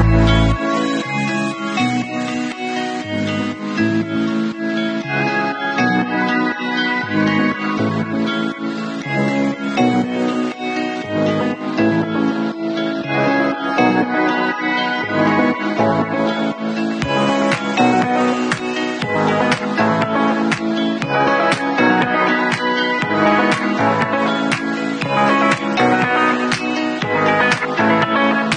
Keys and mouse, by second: 2.0-3.6 middle drag, 3.6-7.9 drag, 10.5 ctrl+s, 12.0-14.3 middle drag, 14.3-21.5 drag, 21.5 shift+middle click, 21.9 shift+click, 22.0-24.0 shift+middle drag, 24.0 click, 24.1 middle click, 24.5 click, 24.6-26.5 middle drag, 26.5-28.5 alt+drag, 28.2 shift+q.